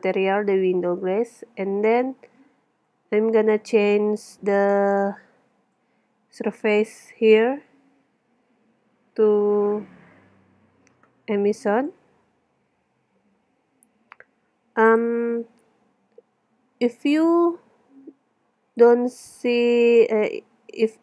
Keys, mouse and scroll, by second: 0.3 middle click, 1.4 middle click, 2.8 click, 4.8-6.7 middle drag, 7.0 middle click, 9.9 middle click, 11.7-13.6 middle drag, 14.7 middle click, 15.2 middle click, 15.9-17.1 middle drag, 17.5 click, 18.5-19.5 drag, 19.8 middle click.